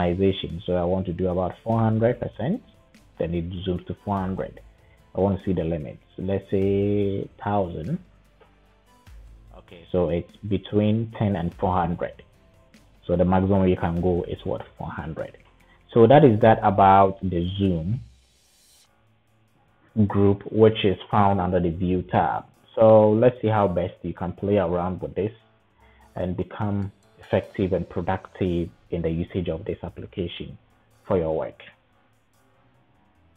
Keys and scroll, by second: 1.2-2.9 typing, 7.1-8.0 typing, 8.3 Return, 14.5-15.5 typing.